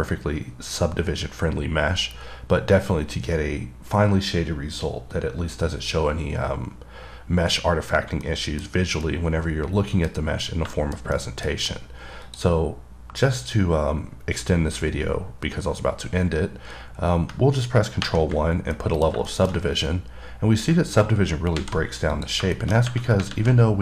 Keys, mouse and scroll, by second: 8.5-9.0 scroll down 2, 8.5 middle click, 9.3 middle click, 10.3 scroll down 2, 11.0 middle click, 11.4 middle click, 11.9 scroll up 2, 12.5 click, 19.0 middle click, 19.6 middle click, 19.8 scroll up 2, 22.4 click, 22.8 middle click, 23.1 scroll up 2.